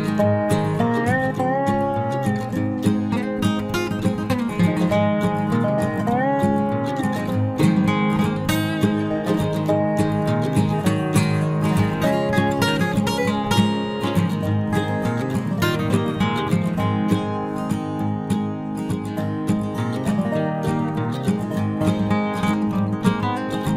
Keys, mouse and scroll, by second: 0.8 Tab, 1.5 z, 2.0 Tab, 2.2 z, 2.7 z, 3.3 z, 6.8-7.9 middle drag, 13.3-17.0 middle drag, 17.3-19.5 middle drag, 22.8 ctrl+Tab.